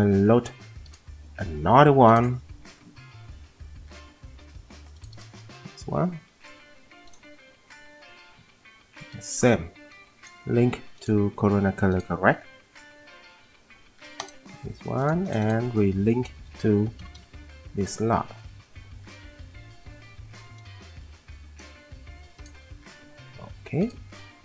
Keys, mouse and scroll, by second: 17.0 F10, 17.2 F10.